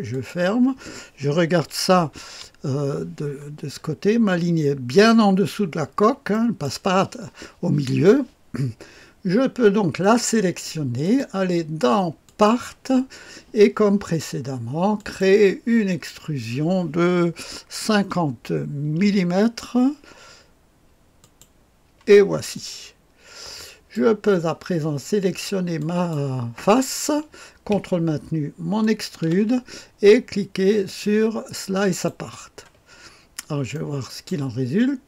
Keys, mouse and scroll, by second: 0.0-2.1 drag, 2.1 KP_1, 3.1-5.0 scroll up 1, 5.0-6.3 scroll down 1, 6.3-7.3 middle drag, 9.9 click, 11.0 click, 12.2 click, 14.9 click, 17.7 KP_5, 18.9 KP_0, 21.1 click, 22.5-24.4 drag, 25.7 click, 28.8 ctrl+click, 30.8 click, 31.8 click, 33.0-34.0 scroll up 1, 33.7-34.7 middle drag, 34.7 click.